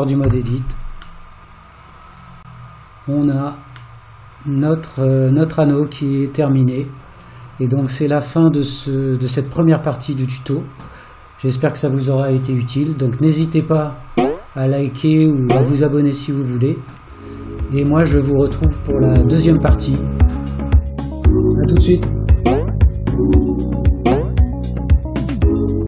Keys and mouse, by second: 0.3 Tab, 1.3-1.9 middle drag, 3.1 click, 4.0-5.0 middle drag.